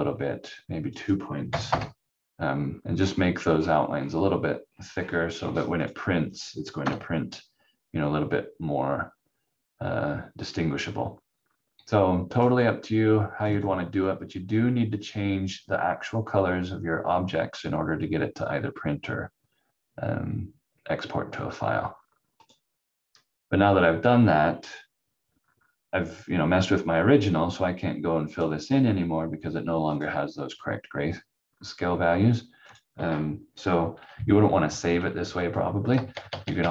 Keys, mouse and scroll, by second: 0.6 click, 1.4 2, 1.6 Return, 3.0 scroll up 1, 3.5-4.1 scroll down 1, 4.9-5.4 scroll up 1, 6.8 F4, 12.3 click, 22.4 click, 28.2 click, 30.8 scroll down 1, 32.6 click, 35.9 ctrl+z, 36.0 ctrl+z, 36.2 ctrl+z, 36.4 ctrl+z, 36.5 ctrl+z.